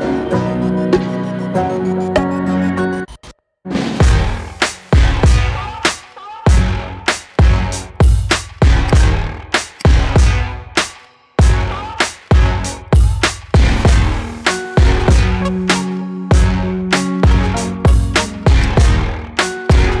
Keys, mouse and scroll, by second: 2.1-2.9 middle drag, 2.9-3.2 scroll down 2, 3.2 middle click, 3.6 scroll up 2, 3.8 middle click, 4.5 KP_1, 4.9-5.2 scroll down 2, 5.6-6.1 scroll up 3, 6.1-6.7 shift+middle drag, 6.7 g, 8.6 scroll down 4, 8.8 click, 9.2-9.7 scroll up 3, 9.7 click, 10.1-10.8 middle drag, 10.8 scroll up 1, 11.1-12.2 middle drag, 12.2 scroll down 2, 12.5-13.5 middle drag, 13.5-14.3 scroll up 2, 14.3 scroll down 2, 14.6-17.0 middle drag, 17.0-18.1 drag, 18.1 scroll up 2, 18.6-19.7 right drag, 19.7 click.